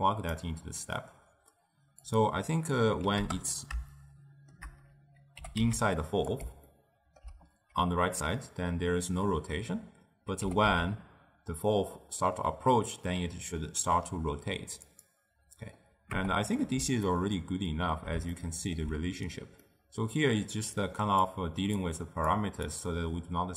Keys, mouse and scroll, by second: 4.0-5.4 shift+middle drag, 5.4 g, 6.8-9.9 ctrl+middle drag, 10.5 g, 16.2 KP_0, 17.1-20.9 shift+middle drag, 20.9 click, 21.9 click, 22.8 click.